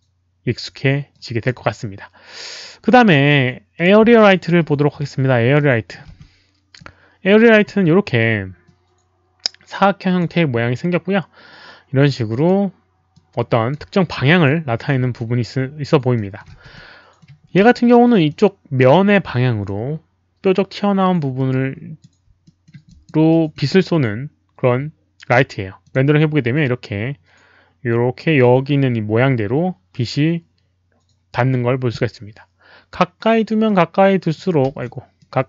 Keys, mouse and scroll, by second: 1.1-1.4 drag, 3.7 click, 5.0 r, 5.5-5.9 middle drag, 5.6 click, 5.6 r, 6.1 w, 6.7 click, 7.6 e, 8.6-10.1 drag, 11.8-12.5 typing, 12.0 click, 12.0 middle click, 13.1 click, 14.2 click, 15.1 alt+click, 16.1 alt+middle click, 16.5 w, 16.7 middle click, 17.6 z, 18.2-19.6 drag, 18.7-19.4 typing, 18.9 alt+middle click, 21.3 click, 22.4 alt+middle click, 22.8 alt+click, 23.2 alt+middle click, 25.6-26.4 typing, 25.8 click, 25.9 middle click, 33.6 click, 33.7 alt+middle click, 34.0 alt+middle click, 34.7 z, 35.1-35.4 drag.